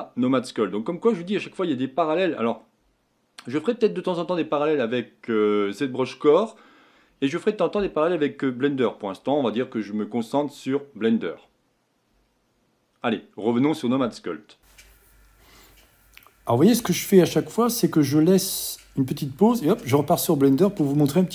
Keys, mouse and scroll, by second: 13.3-14.4 middle drag.